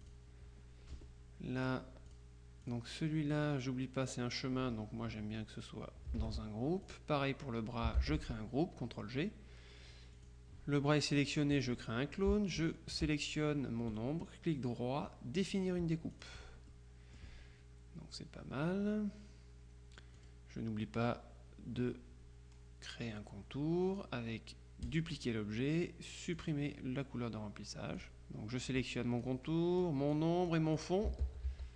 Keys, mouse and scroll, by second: 0.1 click, 1.0 F1, 1.7-3.3 drag, 6.3 ctrl+g, 6.9 click, 8.0 ctrl+g, 10.2 click, 11.6 click, 12.7 shift+click, 14.1 right click, 15.5 click, 16.2 click, 20.2 click, 25.0 click, 26.4 click, 28.0 click, 28.7-29.8 drag, 29.9 click, 31.3 ctrl+z.